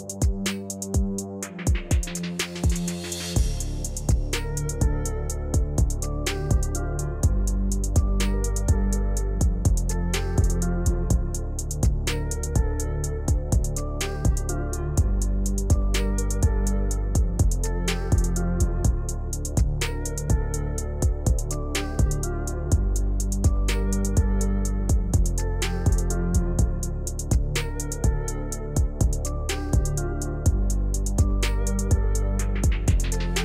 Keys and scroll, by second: 19.7 u, 31.0 p.